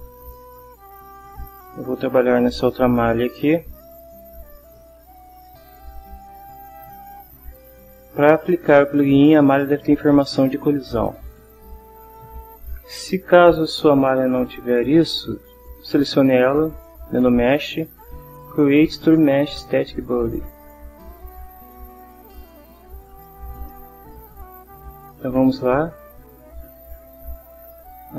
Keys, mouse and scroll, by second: 0.3 shift+middle click, 0.7 shift+scroll up 2, 0.8 shift+scroll down 2, 1.8 shift+click, 1.9 shift+middle click, 1.9-2.3 shift+scroll up 2, 3.2-4.7 ctrl+middle drag, 5.3 click, 6.0 shift+middle click, 6.5 shift+click, 11.7 click, 13.4 Delete, 14.5 click, 15.9 click, 17.1 click, 20.4 click, 25.9 click, 26.5 click, 27.8 click.